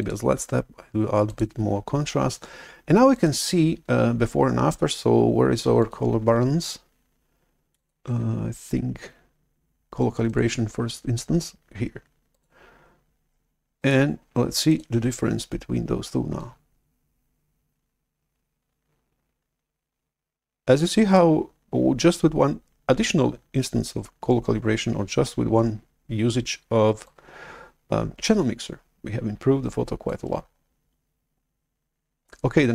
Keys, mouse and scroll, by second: 1.2 click, 3.0 click, 7.6 click, 10.1 click, 12.2 click, 13.7 click, 14.6 click, 16.3-21.1 drag, 21.5-23.3 drag, 27.0-30.0 drag.